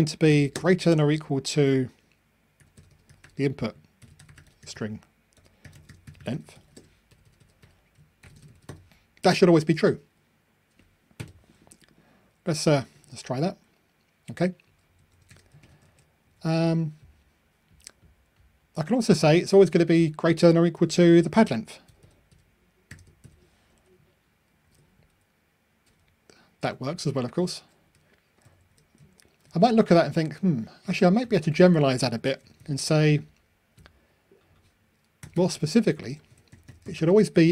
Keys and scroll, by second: 11.4 super+F9, 12.9 ctrl+r, 16.0 super+c, 16.6 super+v, 23.3 super+F9, 24.6 ctrl+r, 32.2 super+c, 32.7 super+v.